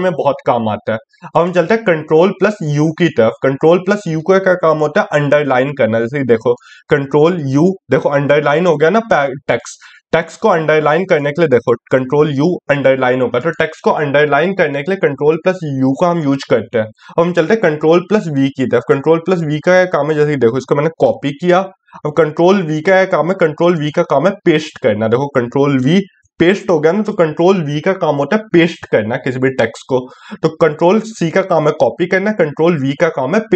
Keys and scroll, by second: 0.8 ctrl+u, 17.1 ctrl+v.